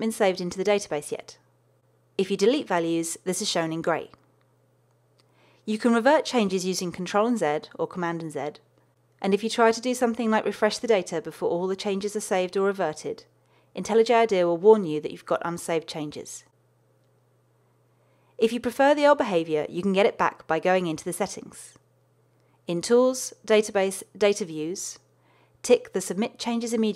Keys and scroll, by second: 0.1 super+BackSpace, 6.8 super+z, 17.2 super+r.